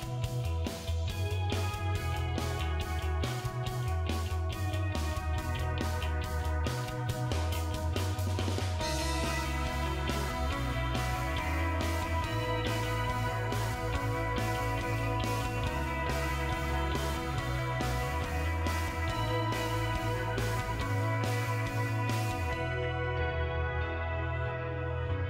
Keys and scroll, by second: 12.2 5.